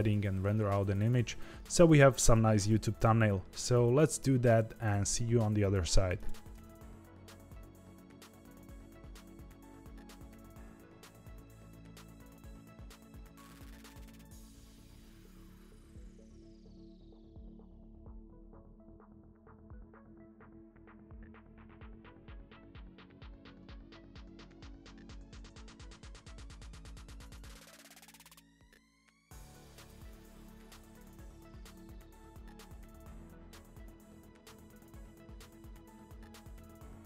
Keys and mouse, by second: 7.3 click, 7.9 middle click, 8.3 shift+a, 9.4 g, 10.1 Tab, 10.3 s, 10.7 r, 11.7 middle click, 11.9 z, 12.0 middle click, 12.6 click, 12.9 x, 13.4 click, 13.5 g, 14.1 click, 14.7 middle click, 14.9 e, 15.3 KP_1, 16.1 middle click, 16.7 f, 16.9 middle click, 17.1 e, 18.3 middle click, 19.2 Tab, 19.3 shift+right click, 19.4 shift+a, 19.9 Tab, 20.0 s, 20.5 s, 21.5 middle click, 21.7 s, 22.2 middle click, 22.6 e, 23.1 a, 23.2 middle click, 23.6 g, 25.3 middle click, 25.6 g, 25.9 Tab, 26.1 click, 26.7 click, 26.9 click, 27.2 Tab, 27.3 g, 28.0 3, 28.5 Tab, 28.7 click, 28.8 ctrl+a, 28.9 Tab, 29.1 3, 29.2 click, 29.5 shift+click, 29.6 shift+middle click, 30.1 shift+middle click, 30.9 ctrl+e, 33.2 click, 34.4-35.5 drag, 36.9-37.0 drag.